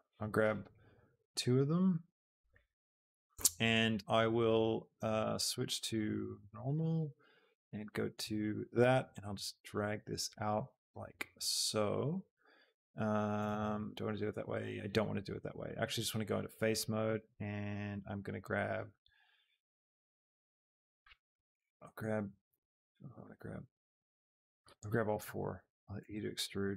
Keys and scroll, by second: 25.7 shift+e, 26.0 Escape.